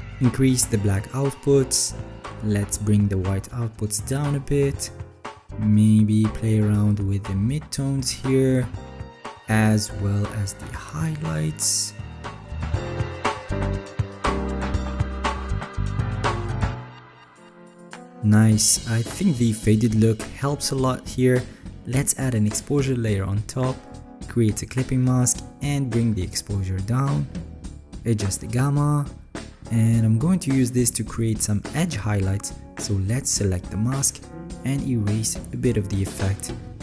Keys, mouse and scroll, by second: 2.2 alt+scroll, 36.6 alt+scroll, 36.7 alt+right click.